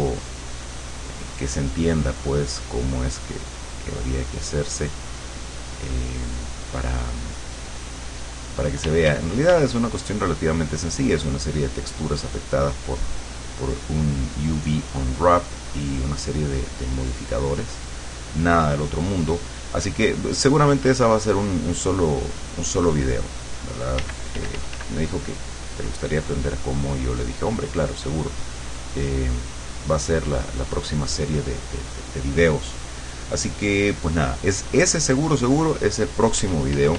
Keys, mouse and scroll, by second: 0.9-2.5 drag, 3.1-4.1 drag, 4.5 click, 7.4 click, 8.2 click, 8.9 d, 9.8-13.7 drag, 22.3-24.2 drag, 24.1 d, 24.4 f, 24.9-30.7 drag, 33.7 click, 35.5 click, 36.5 f.